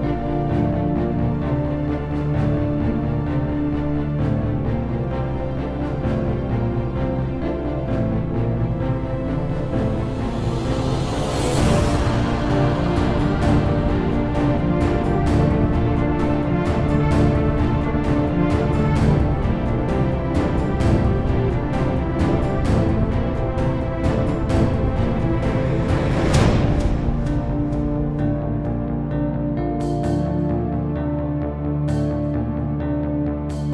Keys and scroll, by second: 0.0-0.5 typing, 1.8-2.6 typing, 3.8 Return, 11.0-11.6 typing, 13.0 Up, 13.0 Return, 24.7 ctrl+w, 26.4-28.3 typing, 29.3 shift+Return.